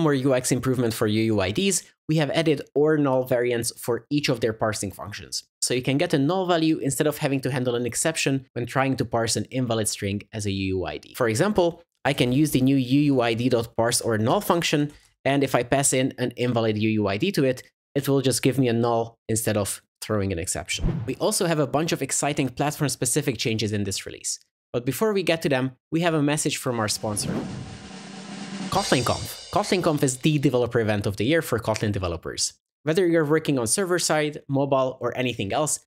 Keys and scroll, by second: 14.4 Return, 15.2 super+v.